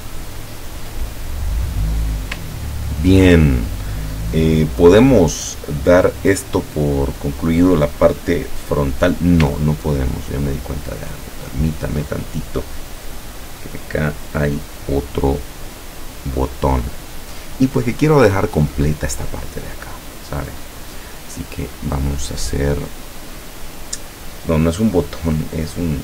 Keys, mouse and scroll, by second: 0.3 ctrl+scroll up 1, 1.5 click, 2.0 scroll up 2, 2.6-3.3 ctrl+scroll down 4, 9.7-10.7 ctrl+scroll up 4, 11.4 ctrl+scroll down 2, 20.8 click, 22.9 click.